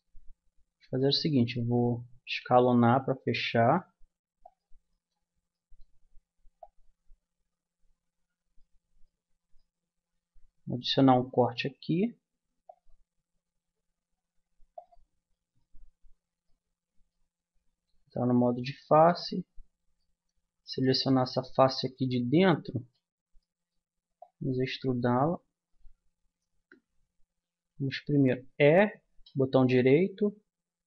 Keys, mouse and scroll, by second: 0.3-2.5 middle drag, 2.2 s, 4.9 click, 6.6-8.4 drag, 8.4 middle click, 8.5 click, 10.3-11.6 middle drag, 11.6 ctrl+r, 15.3 middle click, 15.9 middle click, 18.1-20.1 middle drag, 20.1 middle click, 21.1 middle click, 22.7 right click, 23.4 middle click, 23.6 right click, 24.2 click, 26.0 middle click, 26.5 ctrl+z, 28.5 e.